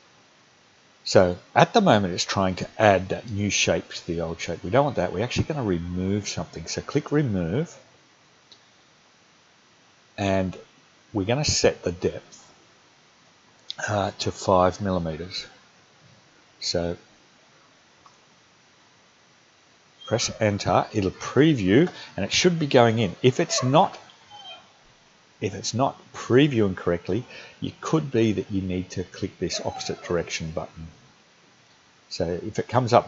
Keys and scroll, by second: 18.0 5, 20.4 Return.